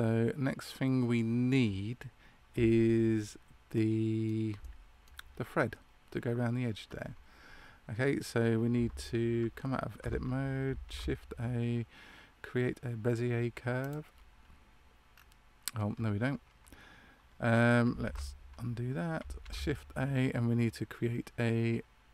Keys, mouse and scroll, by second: 3.7 middle click, 4.5 shift+middle click, 10.8 shift+a, 15.0-15.7 scroll down 2, 15.1-15.7 scroll up 1, 18.0 ctrl+z, 19.3 shift+a.